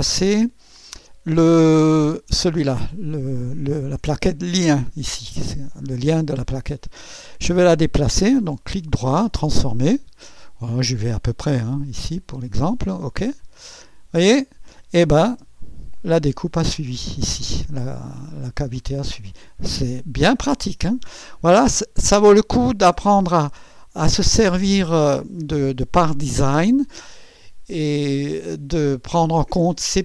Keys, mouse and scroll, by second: 2.2 click, 8.6 right click, 9.4 click, 11.4 click, 13.4 click, 15.3 space, 18.6 click, 19.8 space, 21.5 click, 23.6 scroll up 2, 24.9-26.3 right drag.